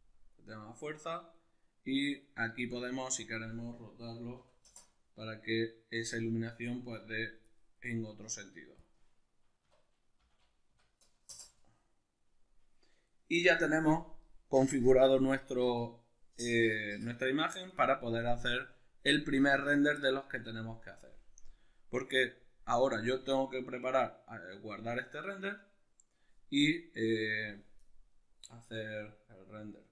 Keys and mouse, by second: 0.3-3.1 middle drag, 3.1-7.4 drag, 4.6 Return, 7.4-8.7 middle drag, 8.7-18.4 drag, 11.3 Return, 28.9-29.8 drag.